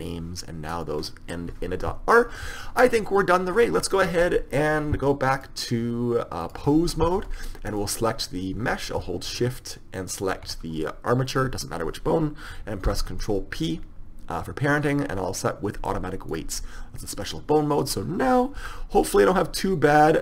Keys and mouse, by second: 0.9-2.7 right drag, 5.5-7.2 drag, 7.8-9.6 right drag, 10.4-12.3 right drag, 13.0 ctrl+p, 17.4-19.3 right drag, 18.7 r, 19.5-20.0 drag.